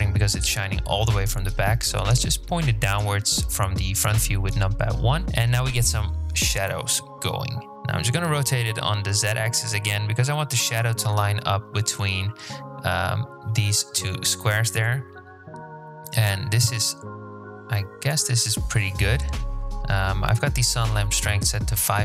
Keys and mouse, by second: 4.8 KP_7, 7.7 r, 16.3-17.5 drag.